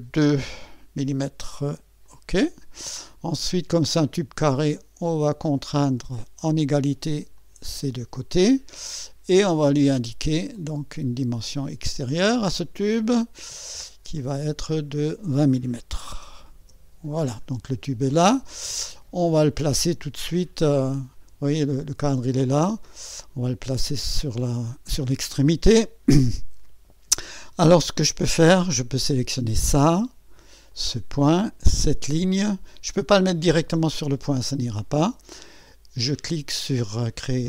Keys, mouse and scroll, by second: 0.1 KP_2, 2.0 click, 4.0 click, 5.5 click, 6.0-6.7 typing, 7.4 click, 10.5 click, 12.3 click, 14.2 click, 15.7-16.9 typing, 17.8 scroll down 1, 18.5-19.6 right drag, 21.1-21.4 scroll down 1, 22.3-23.0 scroll up 2, 22.8-23.5 typing, 24.7 scroll down 1, 24.7 typing, 29.1 click, 30.7 click, 32.4 click, 36.8 click.